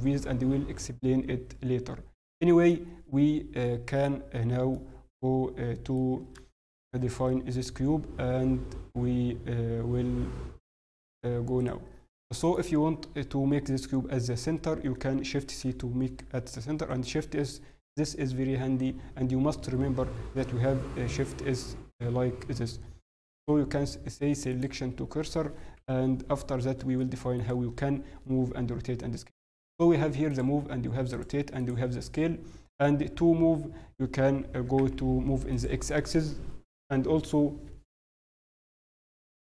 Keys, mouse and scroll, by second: 0.3 click, 2.7 middle click, 7.4 shift+middle click, 11.5 click, 12.0 middle click, 12.8-14.5 scroll down 1, 15.3 shift+c, 16.7 shift+s, 25.3-26.3 scroll down 2, 26.3-27.0 scroll up 1, 27.0 shift+middle click, 28.7-29.1 scroll up 2, 28.7 t, 30.2 click, 33.1 t, 34.5 click, 34.5 g.